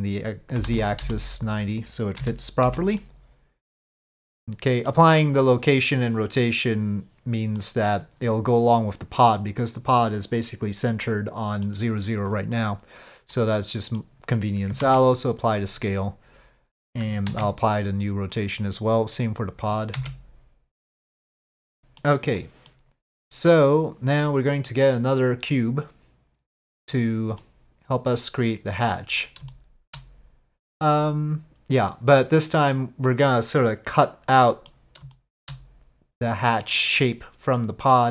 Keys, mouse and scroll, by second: 0.0-1.3 right drag, 2.2 z, 3.0-4.9 middle drag, 7.6 middle drag, 10.4-11.7 middle drag, 13.5-14.1 middle drag, 14.8 ctrl+a, 17.3 ctrl+a, 19.9 ctrl+a, 21.3-22.0 middle drag, 22.4 scroll up 1, 22.5 middle click, 25.3-26.9 drag, 27.4 drag, 27.6-28.9 middle drag, 29.5-29.9 shift+middle drag, 34.5 middle click, 35.2 shift+drag, 37.7 click.